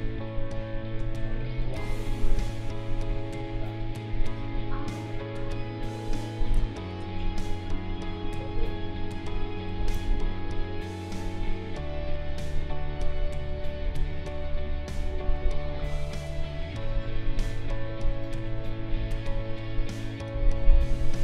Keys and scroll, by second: 1.7 space, 6.5 space, 15.0 space, 20.3 space.